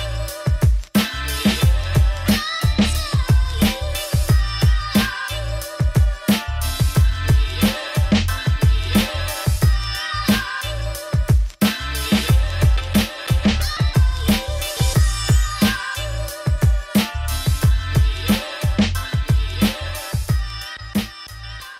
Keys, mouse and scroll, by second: 6.2 click, 6.7 z, 16.5 middle click, 16.9 scroll up 2, 17.1 click, 17.3 Tab, 17.7-19.8 drag, 19.8 shift+s, 20.2 Tab, 21.1 click, 21.4 Tab.